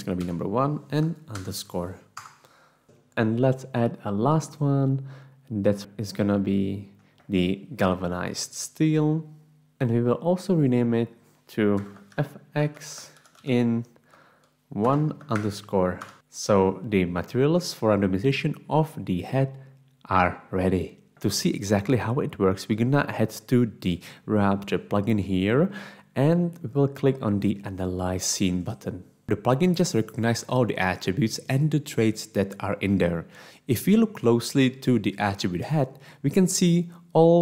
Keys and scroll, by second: 0.0-0.2 typing, 1.3 Return, 11.8-15.9 typing, 16.0 Return.